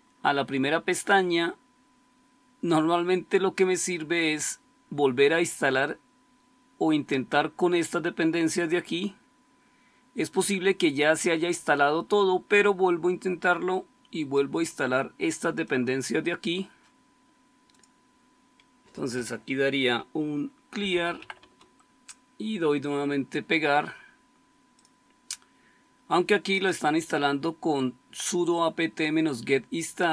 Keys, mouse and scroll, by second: 4.2-7.6 scroll up 1, 7.6-14.7 scroll up 1, 14.7-17.7 scroll up 1, 17.7-19.8 scroll up 1, 19.8-21.7 typing.